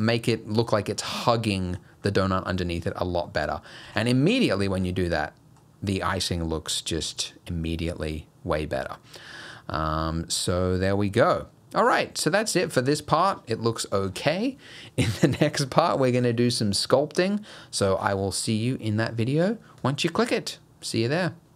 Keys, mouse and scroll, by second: 0.4 middle click, 0.9 scroll down 1, 1.5 middle click, 1.8 scroll down 2, 2.1 middle click, 3.0 scroll down 1, 3.3 middle click, 3.9 alt+a, 4.1 middle click, 4.5 scroll down 2, 4.7 shift+middle click, 5.0 middle click, 5.7 scroll up 1, 6.0 middle click, 6.3 scroll up 2, 7.0 middle click, 7.3 middle click.